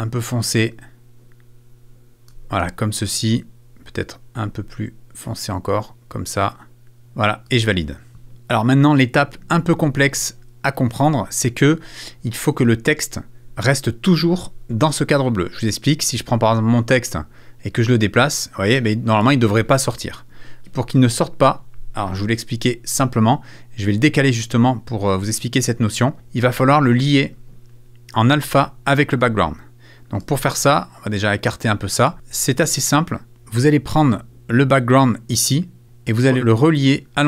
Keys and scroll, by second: 20.7 super+z.